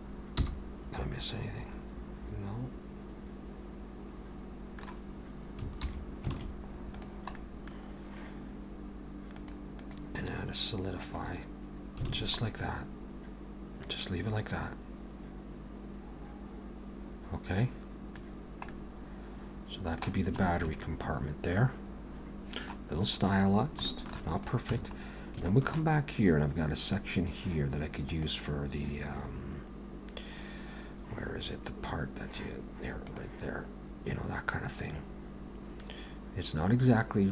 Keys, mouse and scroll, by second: 0.4 h, 1.1 middle click, 5.8 alt+h, 6.4 alt+a, 6.8 click, 7.4 middle click, 9.4 click, 9.8 click, 12.1 alt+a, 12.4 middle click, 18.3-18.7 scroll down 1, 18.7 middle click, 20.4 shift+middle click, 20.8 middle click, 23.9 shift+middle click, 24.3 click, 24.7 Tab, 25.0-25.5 scroll up 2, 25.5 shift+middle click.